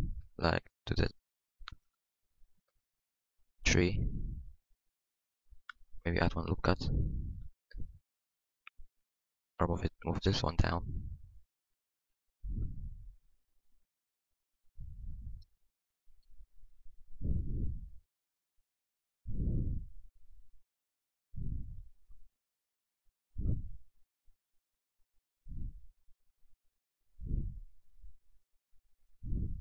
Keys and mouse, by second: 4.0 Tab, 5.5 Tab, 6.3 ctrl+r, 16.9 KP_1, 17.6 KP_1, 18.4 g, 21.1-22.3 middle drag, 22.3 Tab, 22.6 Tab, 24.9-29.6 middle drag.